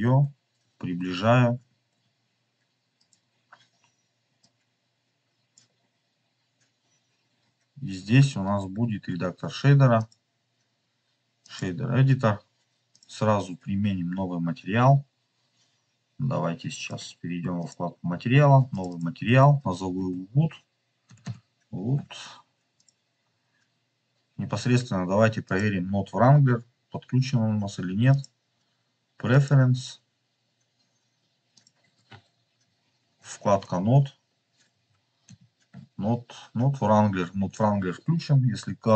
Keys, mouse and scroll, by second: 2.1 w, 3.2 click, 3.2 s, 4.3 click, 5.6 click, 6.7-7.4 scroll up 4, 9.9 click, 11.6 click, 12.8 click, 16.6 click, 17.5 click, 18.6 click, 18.8 click, 21.1 click, 21.2 o, 23.1 scroll down 1, 25.3 scroll down 1, 25.4 click.